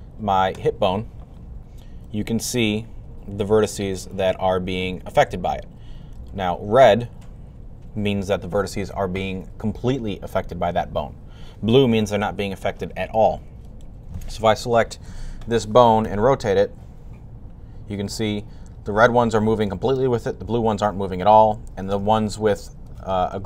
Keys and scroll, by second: 15.9 r.